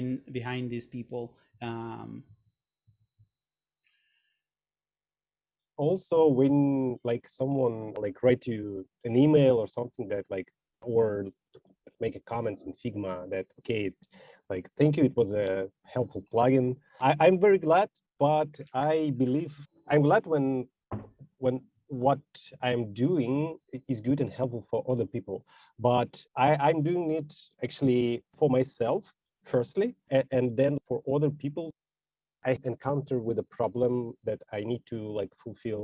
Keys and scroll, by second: 1.8 shift+1, 2.6 shift+2.